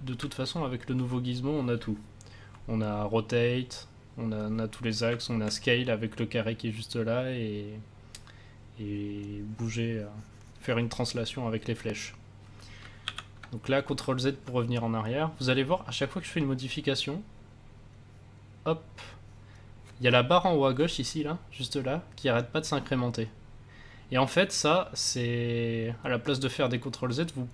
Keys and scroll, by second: 0.1 w, 13.0 ctrl+z.